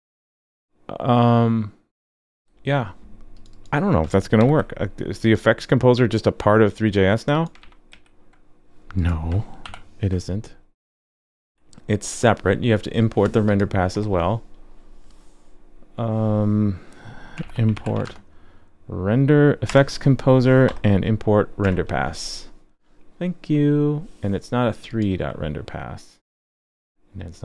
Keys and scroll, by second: 4.4 super+c, 7.6 super+v, 7.9 super+s, 9.6 alt+super+j.